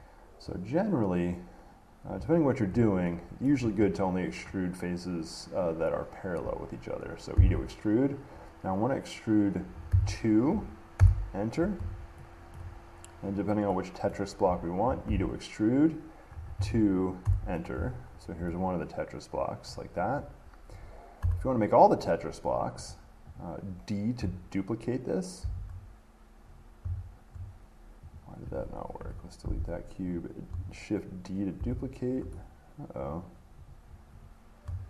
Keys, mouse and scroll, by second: 0.1 click, 0.7 middle click, 0.8 middle click, 0.8 middle click, 2.3 middle click, 2.6 middle click, 3.7 shift+middle click, 4.7 middle click, 4.7 middle click, 7.5 e, 10.1 2, 11.2 Return, 12.7 shift+middle click, 13.5 click, 14.3 middle click, 17.4 Return, 18.2-19.1 scroll, 19.9 middle click, 20.2 scroll, 21.4 Tab, 23.1 click, 23.6 click, 25.6 d, 28.4 click, 29.2 Delete, 30.4 click, 31.8 d, 33.3 click, 33.9 click.